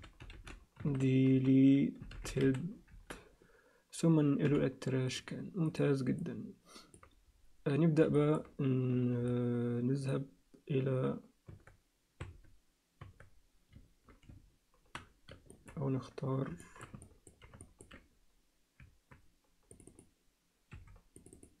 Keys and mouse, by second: 4.4 m, 5.6 click, 6.2 alt+middle click, 8.2 alt+shift+middle click, 11.5 Tab, 12.2 Tab, 13.0 Tab, 15.5 alt+shift+middle click, 16.6 alt+shift+middle click, 17.0 ctrl+alt+middle click, 17.6 ctrl+alt+middle click, 19.9 click, 20.7 2, 21.1 click, 21.3 click.